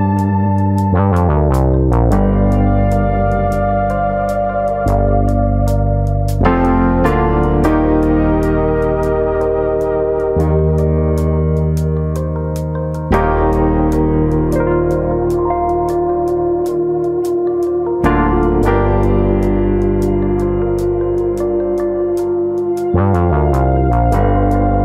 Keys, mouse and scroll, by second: 0.1 middle click, 1.1 click, 1.3 middle click, 1.8 click, 3.9-4.2 scroll up 2, 4.2 middle click, 5.8 click, 6.6 click, 7.8 middle click, 8.4 scroll down 1, 8.6 middle click, 8.9 shift+middle click, 9.1 middle click, 9.6 click, 9.9 middle click, 10.8 click, 12.2 click, 12.5 click, 13.3 middle click, 13.7 middle click, 14.2-14.8 scroll down 2, 14.4 middle click, 14.8 middle click, 15.8 1, 16.1 click, 16.3 middle click, 16.8 click, 17.6 middle click, 18.1 click, 18.6 click, 19.2 middle click, 19.5-19.9 scroll down 4, 19.9 middle click, 20.3 middle click, 20.9 click, 21.7 g, 23.0 click, 23.0 middle click, 23.6 click, 23.8 middle click, 24.3 g.